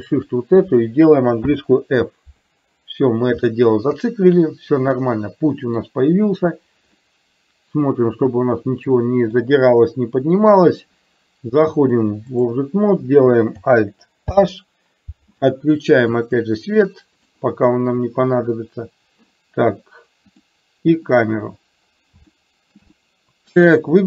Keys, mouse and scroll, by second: 0.0 shift+click, 1.5 f, 3.6 shift+middle click, 5.1 middle click, 7.1-9.5 middle drag, 12.0 click, 14.3 alt+h, 16.7 click, 20.3 click, 22.3 shift+middle click, 23.1 middle click.